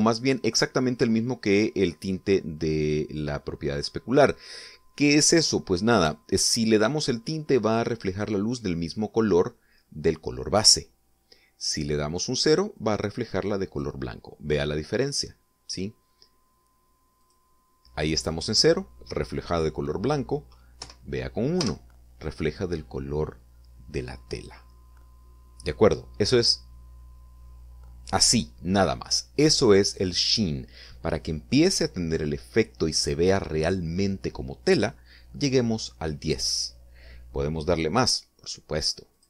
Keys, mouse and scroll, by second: 13.8-15.0 drag, 18.2 click, 21.8 1, 22.6 Return.